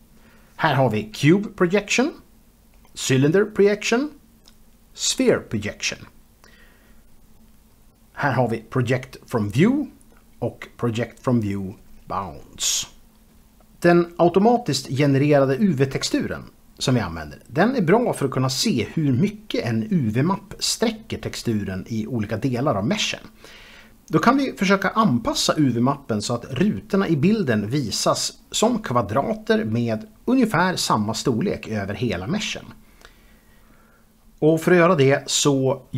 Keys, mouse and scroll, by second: 0.2 ctrl+z, 1.4 click, 2.7 ctrl+z, 3.4 u, 3.8 click, 4.6 ctrl+z, 5.5 u, 6.0 click, 7.9 ctrl+z, 8.4 u, 9.0 click, 10.9 ctrl+z, 11.8 u, 12.4 click, 13.8 ctrl+z, 15.8 KP_Divide, 19.4 ctrl+alt+q, 34.8 z, 35.3 z.